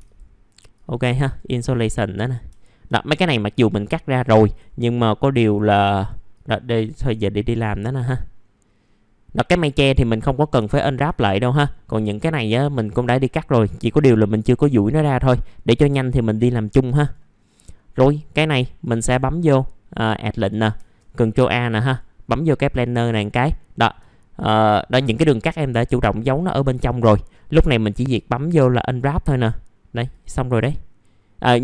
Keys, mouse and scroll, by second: 0.0 ctrl+click, 0.7 ctrl+click, 1.2 right click, 2.1 click, 2.5 alt+middle click, 3.1-3.5 scroll down 1, 3.5 click, 3.8 middle click, 4.2 click, 8.4-9.9 scroll up 1, 9.9-10.5 scroll down 1, 10.7 alt+middle click, 11.5 click, 12.1-12.4 scroll up 1, 13.0 right click, 13.9 click, 15.0 middle click, 15.9 click, 16.5 alt+middle click, 16.9 right click, 17.3-17.6 scroll up 1, 17.6 middle click, 18.8 click, 21.8 click, 23.5 middle click, 24.0 alt+middle click, 25.5 alt+middle click, 26.3 scroll up 1, 26.6 alt+middle click, 27.1-28.1 scroll down 1, 28.1 click.